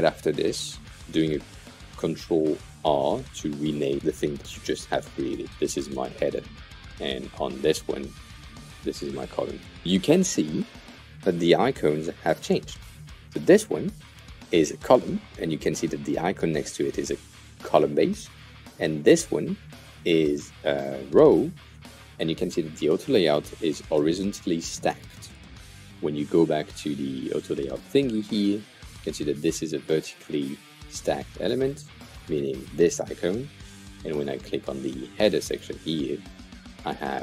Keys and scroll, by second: 2.4 super+r, 5.5-7.0 typing, 8.7 super+r, 8.8-10.3 typing.